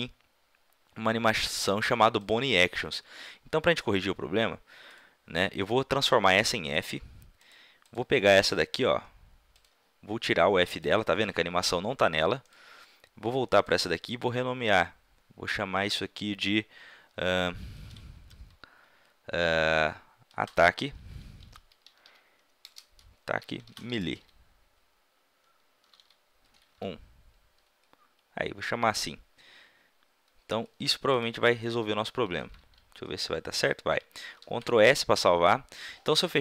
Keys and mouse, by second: 4.8-6.6 drag, 6.7-9.6 drag, 10.8-14.2 middle drag, 14.6-16.4 middle drag, 32.3 a, 32.6 a, 34.3 ctrl+s.